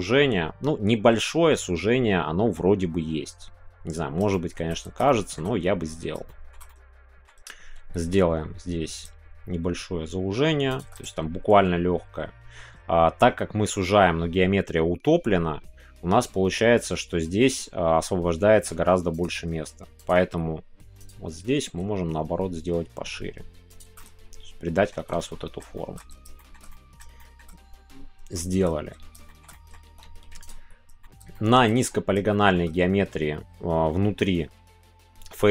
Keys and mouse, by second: 4.3 shift+middle click, 5.0 shift+middle click, 6.2 shift+middle click, 6.6-9.1 middle drag, 10.8 shift+click, 10.9 middle click, 19.1 click, 20.0 alt+click, 21.0-22.2 drag, 23.7 click, 24.0 middle click, 25.0 Tab, 25.1 middle click, 25.7 shift+middle click, 26.3 shift+middle click, 26.7 middle click, 27.2 shift+middle click, 28.3 shift+middle click, 29.5 middle click, 29.8 Tab, 30.4 alt+click, 31.3 shift+middle click, 32.3 shift+middle click.